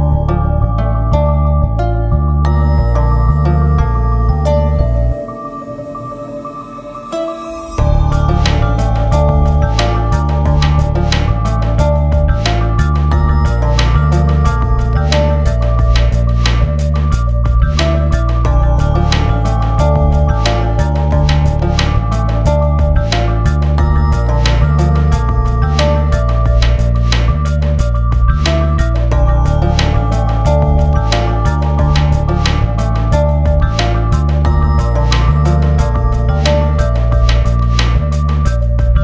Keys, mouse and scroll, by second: 0.5 click, 2.5 Up, 4.1 click, 4.5 ctrl+s, 4.5 click, 4.8 F4, 5.2 click, 6.1 ctrl+s, 6.9 click, 7.5 shift+c, 7.7 shift+click, 9.2 ctrl+s, 10.5 click, 12.9 click, 15.0 click, 15.8 F4, 21.9 click, 23.9 click, 24.3-32.1 ctrl+drag, 32.1 ctrl+z, 32.5 ctrl+space, 34.4 click, 36.4 ctrl+z, 37.7-39.0 ctrl+drag.